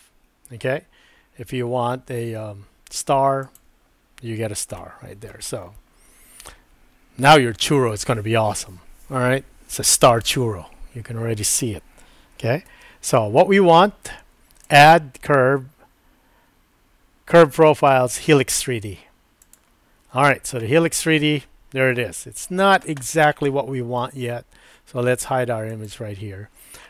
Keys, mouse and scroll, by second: 4.9 middle click, 12.7 super+z, 14.8-19.6 drag, 20.7-22.5 middle drag, 25.7 click.